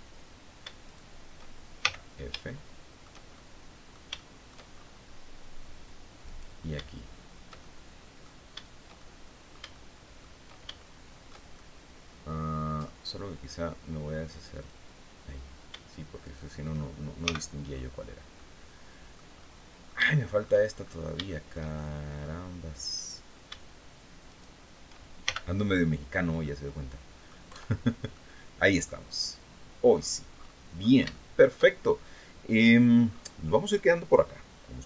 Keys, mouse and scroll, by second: 0.3 shift+right click, 1.3 shift+f, 1.9 shift+middle click, 2.8-4.1 shift+middle drag, 4.2-4.6 shift+scroll up 1, 5.7 right click, 7.1 shift+middle click, 8.4 shift+middle click, 10.3 shift+middle click, 11.0-12.5 shift+middle drag, 14.1 click, 15.7 shift+right click, 17.2-17.8 scroll down 2, 17.2 f, 17.8 click, 18.9-20.1 drag, 20.5 scroll up 1, 20.7 shift+click, 21.5 middle click, 22.3 right click, 23.7 shift+right click, 24.7 shift+f, 25.2-25.5 shift+scroll down 3, 25.9-26.9 middle drag, 27.0 Tab, 27.3 scroll down 2, 27.6 click, 29.4 scroll down 1, 29.8-30.5 scroll up 2, 30.6 shift+click, 32.0-32.3 scroll down 1, 32.5-32.9 scroll up 2, 33.8 scroll down 2.